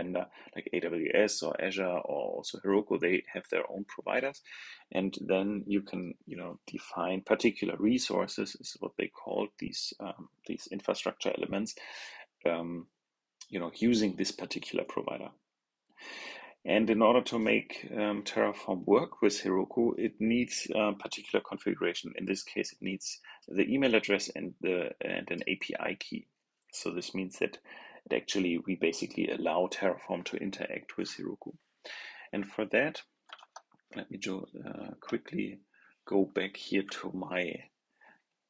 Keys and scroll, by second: 33.3 super+Tab.